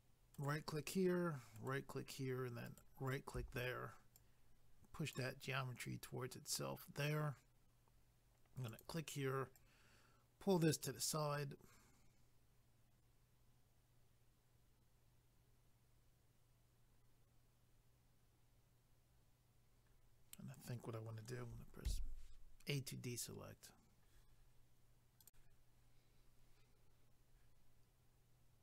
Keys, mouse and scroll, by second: 0.3 ctrl+right click, 4.1 click, 8.7 click, 9.6 click, 25.2 click.